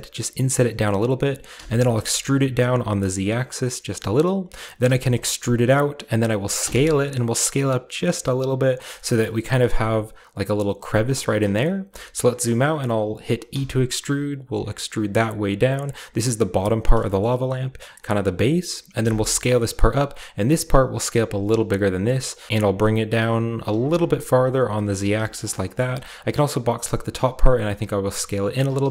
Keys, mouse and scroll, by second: 0.6-1.6 drag, 1.5-2.6 typing, 4.3 click, 4.8 typing, 6.6 typing, 8.8 shift+click, 8.9-10.4 shift+middle drag, 9.4-10.4 shift+scroll up 1, 10.4-11.4 scroll up 1, 11.4-13.2 scroll down 1, 11.9-14.1 shift+middle drag, 13.2-14.7 shift+scroll down 1, 13.5 typing, 15.8 click, 17.0-19.0 shift+middle drag, 17.3-19.0 shift+scroll down 2, 19.2 s, 20.8 click, 21.9-25.1 typing, 22.3 click, 23.3-24.4 right drag, 24.5 click, 24.5 right click, 24.9 click, 24.9 right click, 25.5-26.3 shift+scroll down 2, 27.5 typing, 28.6-28.9 typing.